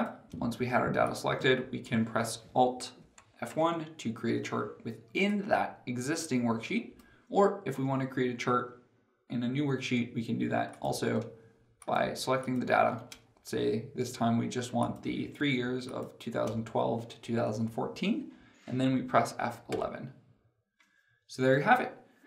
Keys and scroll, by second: 3.3 alt+F1, 19.6 F11.